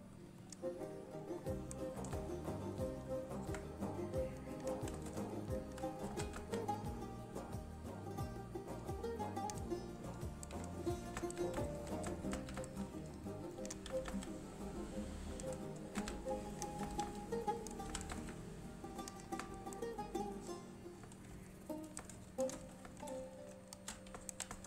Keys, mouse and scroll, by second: 0.5 click, 1.6-2.3 scroll down 1, 2.4 shift+middle click, 3.2 scroll up 1, 3.6 Tab, 4.7 click, 5.4 alt+shift+click, 6.2 g, 6.5 z, 9.4 click, 9.8-10.2 scroll down 1, 10.2 Tab, 10.8 scroll down 1, 10.9 middle click, 11.3 z, 11.8 3, 12.7 shift+a, 12.8 shift+middle click, 12.9-13.4 scroll up 1, 13.4-14.0 click, 14.0 g, 14.2 g, 15.6 click, 16.1-18.3 typing, 16.7 click, 17.7 right click, 19.1 click, 19.4 scroll down 1, 19.7 shift+middle click, 20.5 click, 21.7 scroll down 1, 21.7 middle click, 22.5 shift+click, 24.4-24.6 typing.